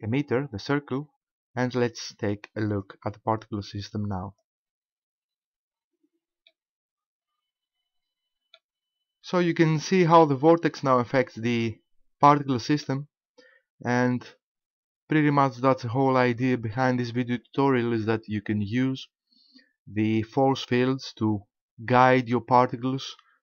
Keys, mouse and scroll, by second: 0.9 scroll down 1, 2.7 click, 4.3 click, 6.5 middle click, 7.4 middle click, 8.6 middle click, 9.6 shift+middle click, 10.8 middle click.